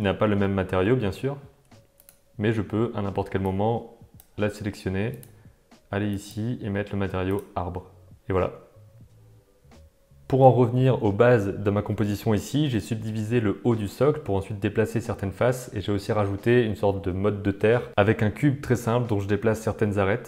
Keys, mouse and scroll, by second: 0.5 shift+middle click, 2.0 click, 3.6 click, 10.9 right click, 11.4 super+right click, 12.2 middle click, 12.4 click, 12.5 middle click, 12.9-16.7 typing, 13.4 middle click, 14.3 middle click, 14.6 click, 17.0 middle click, 17.2 shift+middle click, 17.4 middle click, 17.6 Tab, 18.2 click, 18.6 click, 18.8 g, 19.4 click, 19.6 g, 19.8 Tab, 20.0 alt+a, 20.1 middle click.